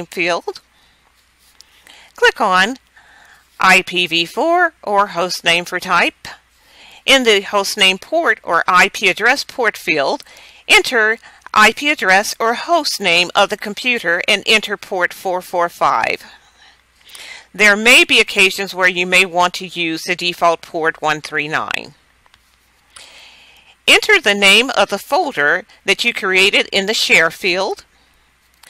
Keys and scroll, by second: 0.0-3.3 typing, 10.5 Caps_Lock, 10.8-12.6 typing, 13.6-16.3 typing, 19.6 4, 20.2 5, 21.6 Caps_Lock, 24.5-26.2 typing.